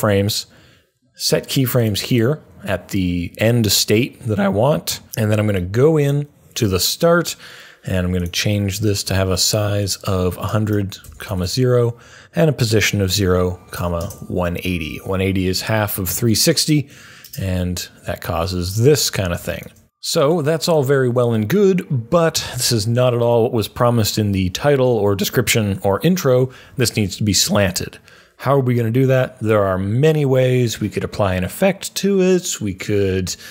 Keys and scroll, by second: 10.6 typing, 12.8-13.7 typing.